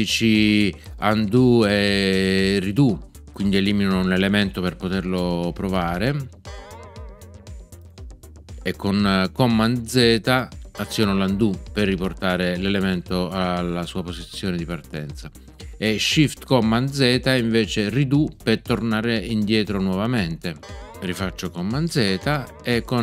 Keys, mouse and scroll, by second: 6.4 BackSpace, 10.7 super+z, 20.6 shift+super+z, 22.0 super+z.